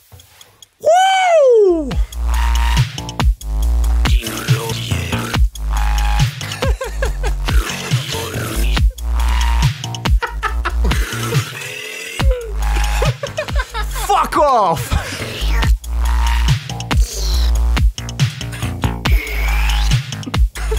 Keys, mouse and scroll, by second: 9.3-10.2 shift+scroll down 5, 15.4-15.8 shift+scroll down 2.